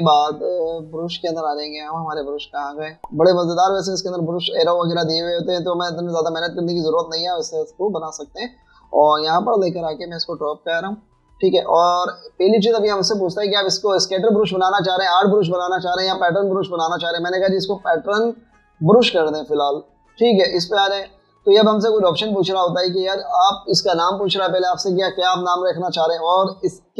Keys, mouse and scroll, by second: 15.1 right click, 21.2 double click.